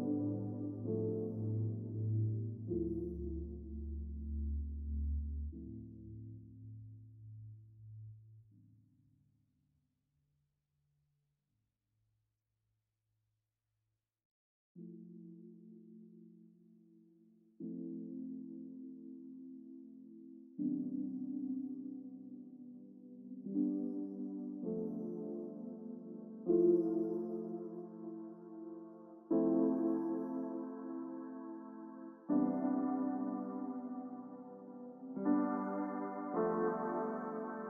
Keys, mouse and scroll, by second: 12.3 shift+click, 18.1 shift+click, 21.7 s, 22.8 right click, 29.8 ctrl+click, 34.0 shift+click.